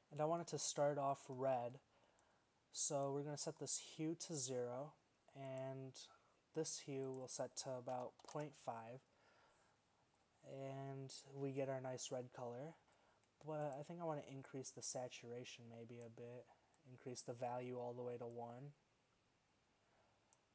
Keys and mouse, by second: 2.9-3.9 drag, 5.6-7.6 drag, 12.4 middle click, 13.8-15.7 drag.